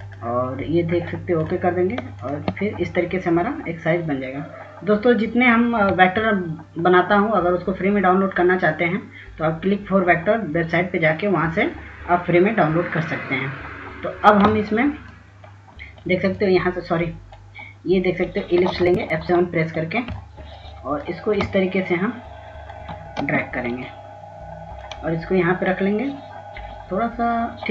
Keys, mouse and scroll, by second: 0.2 click, 1.2 click, 19.2-20.2 drag, 19.2 s, 20.2 s, 21.4-23.5 shift+drag, 23.6 space, 24.3 click.